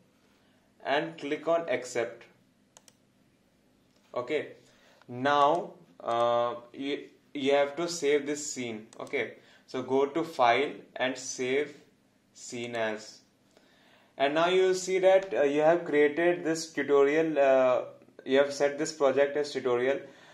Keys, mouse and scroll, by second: 5.4 click, 8.9 click.